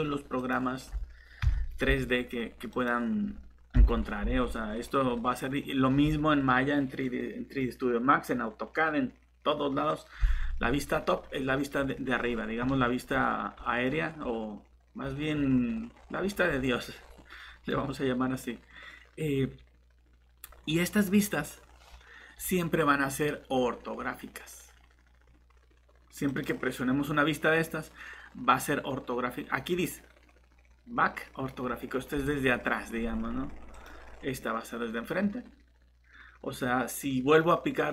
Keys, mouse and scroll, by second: 1.4 Delete, 3.8 ., 4.3 scroll down 1, 13.5 scroll up 1, 15.0 scroll down 1, 15.9 scroll up 1, 17.7 scroll down 1, 26.3 click.